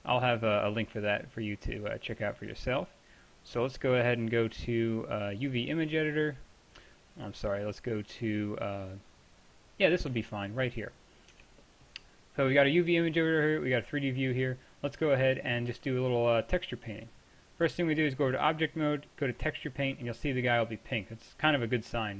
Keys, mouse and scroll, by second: 7.2-8.9 drag, 11.4 Tab, 15.7 t, 17.2 click, 18.8 click, 19.0 click.